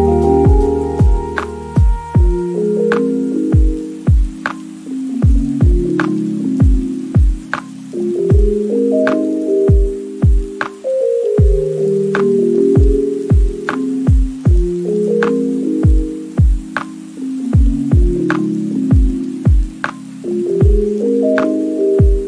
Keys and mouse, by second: 0.3 shift+click, 0.5 x, 0.8 middle click, 0.9 middle click, 1.4 x, 1.5 middle click, 1.7 x, 1.8 shift+middle click, 2.0 KP_1, 2.1 middle click, 2.3 shift+middle click, 2.7 middle click, 3.1 2, 3.7 f, 4.1 f, 4.3 f, 4.7 alt+click, 4.9 middle click, 5.6 middle click, 6.0 click, 6.0 3, 6.1 x, 6.3 middle click, 6.7 middle click, 7.7 shift+click, 7.9 shift+middle click, 8.1 middle click, 8.6 2, 8.8 shift+click, 9.2 f, 9.5 3, 9.8 shift+middle click, 10.1 shift+middle click, 10.2 shift+click, 10.4 middle click, 10.6 middle click, 11.1 e, 11.2 click, 11.4 shift+middle click, 11.7 middle click, 12.2 middle click, 12.5 ctrl+r, 12.8 1, 13.0 g, 13.0 click, 13.2 g, 13.2 z, 13.3 click, 13.7 Tab, 14.1 Tab, 14.2 middle click, 14.9-18.3 typing, 15.2 middle click, 16.6 right click, 17.4 click, 17.6 middle click, 18.1 Tab, 19.4 ctrl+s, 20.0 shift+middle click, 20.4 click, 20.7 shift+click, 21.3 ctrl+j, 21.8-22.2 typing.